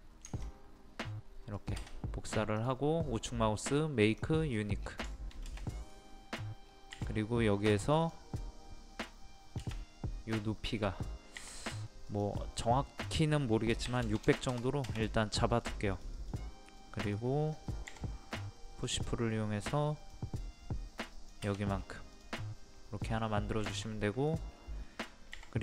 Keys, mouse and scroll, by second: 0.3-1.4 ctrl+drag, 2.6 right click, 4.1 click, 4.6 scroll down 1, 5.2 shift+middle click, 6.7-7.0 scroll up 1, 8.0 click, 10.4 space, 11.4 t, 12.1 click, 13.9 KP_6, 15.4 middle click, 16.0 click, 17.9 p, 18.9 click, 21.8 scroll down 1, 21.9 scroll up 1, 22.2 click, 22.6 middle click, 23.3-23.7 scroll down 1, 23.8 shift+middle click, 24.5-24.8 scroll up 1, 25.4 typing.